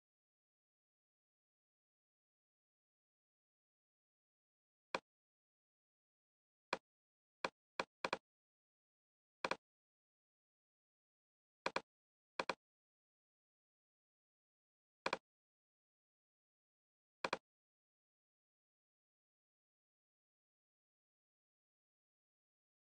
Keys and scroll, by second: 2.8 super+d.